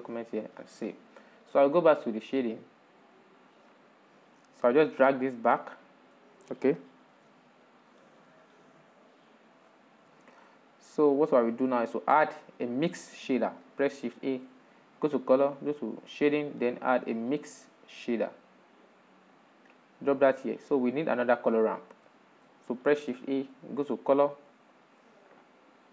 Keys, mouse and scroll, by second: 0.0 click, 2.7 click, 4.9 click, 5.4 click, 5.8-8.7 shift+middle drag, 12.5-19.4 drag, 21.3 click, 22.2-23.1 shift+middle drag, 23.1 shift+a.